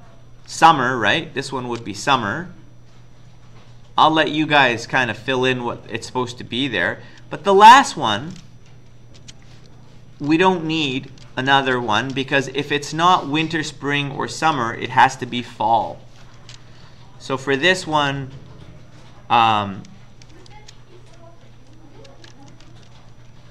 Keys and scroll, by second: 7.2 Return, 9.2 Return, 10.5-12.2 typing, 13.6 Up, 14.8 Down, 15.0 Down, 16.4 Up, 16.9 Up, 17.5 Tab, 19.4 Up, 19.6 Up, 20.5 shift+End, 22.1 ctrl+c, 22.5 Down, 22.7 Down.